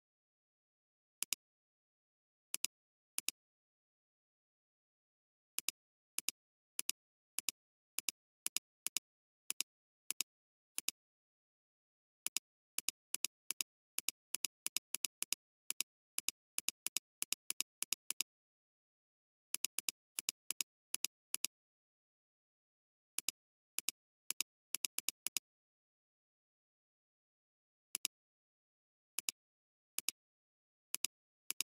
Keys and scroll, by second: 1.2 alt+space, 1.9 alt+space, 4.9-5.5 typing, 8.8 space, 10.7 typing, 13.5 space, 15.6 space, 22.8 ], 22.9 ], 23.1 ], 31.5 space.